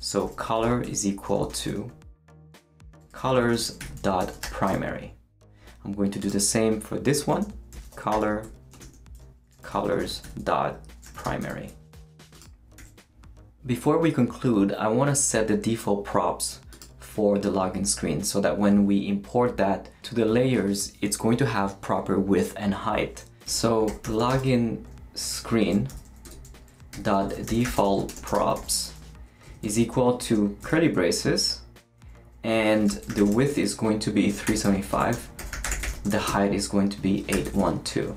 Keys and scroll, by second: 0.0-1.8 typing, 2.9-4.9 typing, 7.2-11.7 typing, 12.8 super+s, 23.4 Return, 23.6-30.2 typing, 30.6 shift+Return, 31.4 Return, 32.5-38.1 typing.